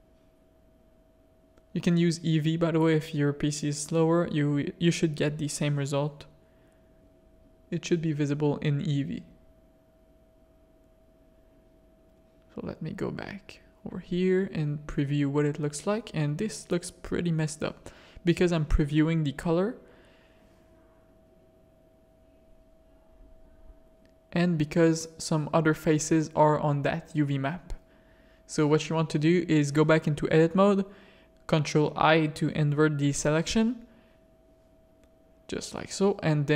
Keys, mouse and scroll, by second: 1.8 s, 4.7 g, 5.9 s, 7.9 Tab, 9.9 middle click, 10.4 shift+middle click, 12.2 click, 16.3 click, 17.2 click, 18.6 ctrl+shift+click, 21.2 middle click, 22.9 middle click, 23.8 middle click, 25.8 middle click, 26.8 click, 28.4 click, 29.5 click, 30.6 click, 31.9 click, 32.8 shift+click, 33.3 Tab, 33.5 click, 35.2 ctrl+i.